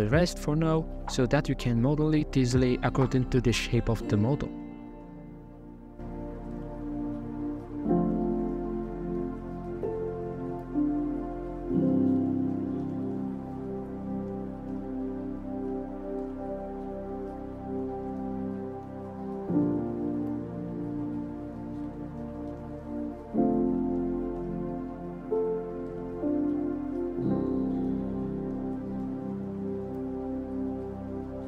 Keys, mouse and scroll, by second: 0.2 scroll down 2, 0.4 middle click, 0.7 scroll up 2, 0.7 Tab, 1.4-1.7 shift+middle drag, 1.7 a, 2.0 Tab, 3.0 click, 3.4 click, 3.7 click, 4.2 click, 5.0 Tab, 5.4 scroll up 3, 5.8 alt+z, 6.3 shift+middle click, 6.6 Tab, 6.9 right click, 8.1 ctrl+KP_Add, 8.3 ctrl+KP_Add, 8.5 ctrl+KP_Add, 8.9 x, 10.0-11.2 middle drag, 11.2 KP_1, 11.8 KP_5, 12.0 KP_5, 12.5 Tab, 12.9 alt+right click, 13.8 g, 14.5 g, 17.9 e, 20.5 f, 21.0 middle click, 21.8 ctrl+b, 26.2 scroll down 3, 26.3 middle click, 26.6 g, 26.7 m, 29.9-30.3 scroll up 4, 30.5 Tab.